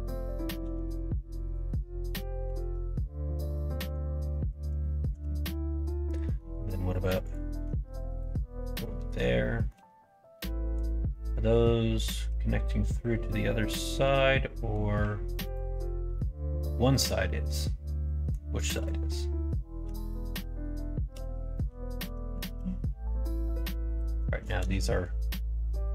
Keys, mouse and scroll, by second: 0.6 ctrl+r, 2.5 ctrl+z, 3.1 middle click, 4.1 middle click, 4.8 shift+middle click, 5.7 middle click, 7.8 middle click, 9.3 shift+middle click, 10.3-14.7 middle drag, 15.4 alt+click, 16.1-18.3 middle drag, 18.7 click, 19.8 l, 21.1 h, 21.6 middle click, 22.4 ctrl+z, 23.2 middle click.